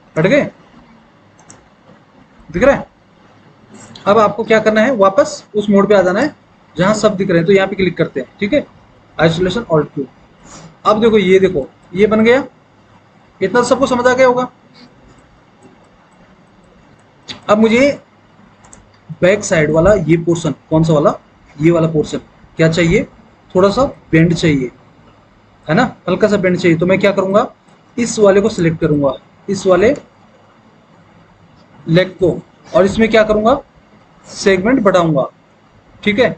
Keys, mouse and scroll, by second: 6.2 click.